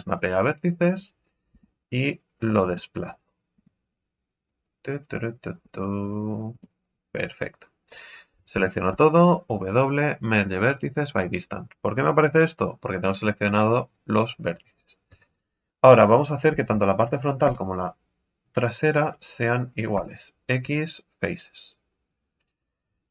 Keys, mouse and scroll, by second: 1.5 g, 2.3 right click, 2.6 g, 3.3 right click, 3.5 g, 4.4 right click, 4.7 g, 5.4 right click, 5.6 g, 6.3 right click, 6.5 g, 7.1-7.8 scroll down 1, 7.8-8.3 scroll up 2, 8.3 a, 8.5 a, 8.9 w, 15.1 KP_3, 16.0-16.5 scroll down 1, 16.5 a, 16.7 z, 17.4 b, 19.9 x.